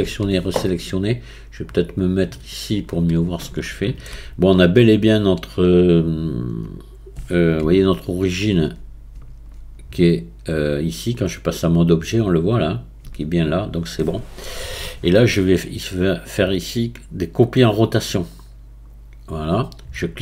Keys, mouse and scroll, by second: 0.0 a, 1.3-2.4 scroll down 5, 2.4 scroll down 2, 2.6 click, 3.4-6.4 shift+middle drag, 8.3 Tab, 9.1 Tab, 9.9 click, 13.6 Tab, 15.7-18.8 drag.